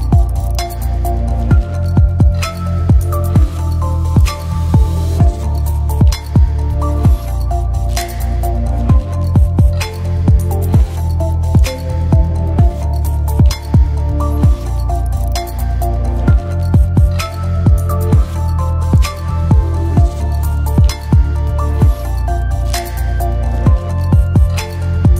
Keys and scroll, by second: 2.8 BackSpace, 4.1-5.1 typing, 16.9 o, 16.9 space, 17.4 b.